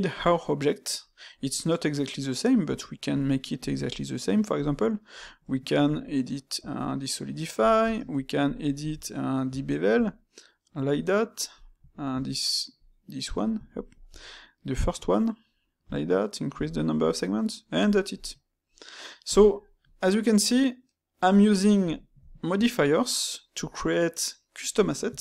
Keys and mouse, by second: 17.0-19.3 middle drag, 21.5-25.2 middle drag.